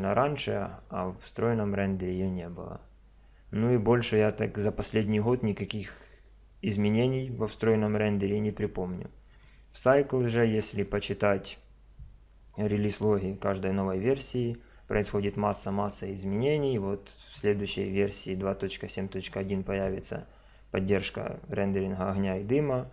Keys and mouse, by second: 9.3 click.